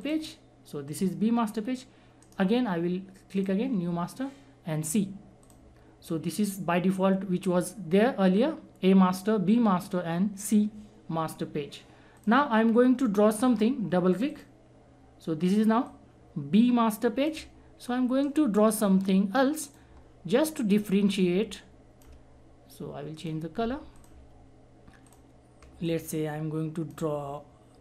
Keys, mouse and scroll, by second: 0.0 click, 2.2 right click, 3.3 click, 12.1-18.2 drag, 18.2-19.7 right drag, 19.7 click, 19.7-23.2 drag, 25.9-27.8 alt+drag.